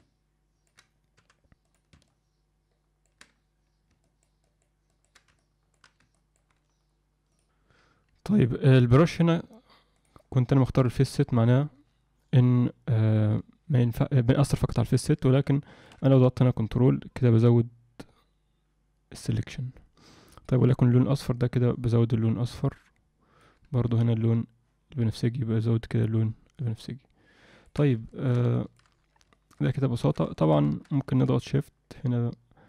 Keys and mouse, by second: 2.1-3.1 ctrl+drag, 4.0 ctrl+click, 4.4 ctrl+click, 4.9 ctrl+click, 5.3 alt+middle click, 6.1 ctrl+click, 7.4 ctrl+z, 10.1-15.1 drag, 15.6 ctrl+middle click, 16.4-20.5 ctrl+drag, 21.3-23.4 ctrl+drag, 23.9-27.7 ctrl+drag, 28.1 ctrl+middle click, 28.5 alt+shift+middle click, 29.3 alt+shift+middle click, 29.7 ctrl+alt+middle click, 30.0 ctrl+middle click, 30.3 alt+shift+middle click, 30.9 alt+shift+middle click, 31.5-32.6 shift+drag.